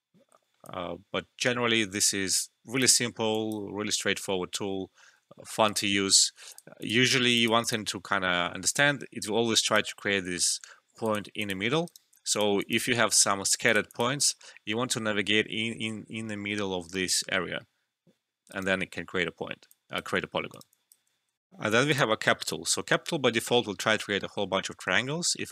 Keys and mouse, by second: 0.4 alt+middle click, 0.6-3.0 alt+drag, 3.0 alt+middle click, 3.3 alt+click, 5.2 alt+middle click, 5.6 alt+right click, 6.5 click, 8.7 right click, 11.0 click, 11.8 right click, 12.3 click, 13.2 alt+middle click, 13.6 click, 18.5 right click, 19.3 alt+middle click, 19.7 alt+click, 20.2 alt+middle click, 20.5 alt+right click, 20.7 alt+click, 21.4 alt+F12, 21.8 click.